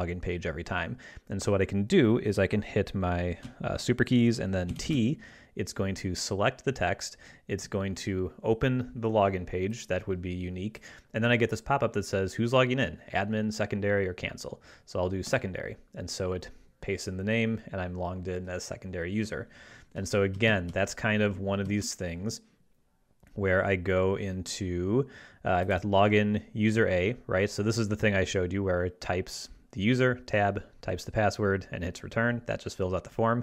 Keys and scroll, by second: 4.7 ctrl+alt+super+t, 15.4 Tab, 20.4 ctrl+Left, 21.6 ctrl+Left.